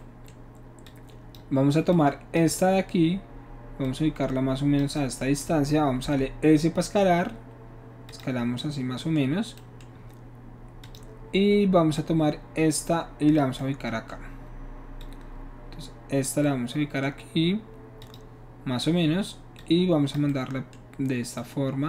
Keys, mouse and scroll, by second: 0.0-0.9 middle drag, 0.9-1.3 drag, 1.9-2.4 drag, 3.8-4.8 drag, 6.3 s, 8.1 drag, 8.6-9.3 middle drag, 9.6-9.9 middle drag, 10.9 click, 12.0-13.4 drag, 13.6-15.0 middle drag, 15.0-16.2 drag, 16.4-17.0 middle drag, 18.0 click, 19.6 click, 21.4-21.8 drag.